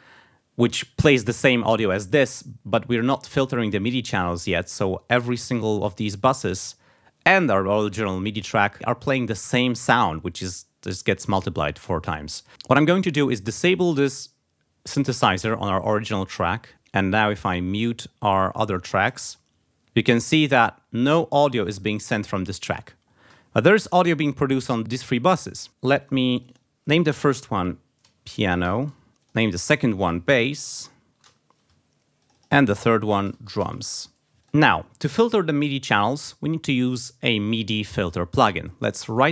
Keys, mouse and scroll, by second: 5.3 click, 6.2 click, 7.7 click, 13.5 click, 15.4 click, 16.7 click, 17.3 click, 17.8 click, 18.3 click, 19.1 space, 21.0 space, 23.2 space, 24.8 space, 26.0 click, 26.4 click, 27.3-31.2 typing, 29.2 click, 31.2 shift+Return, 32.2 click, 32.9-34.2 typing, 34.4 click, 39.1 click.